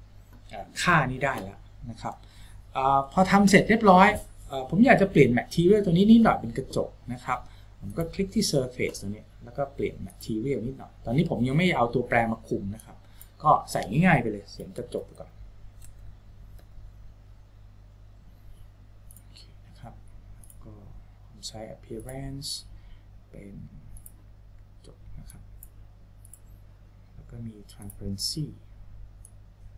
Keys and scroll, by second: 14.6-16.1 typing.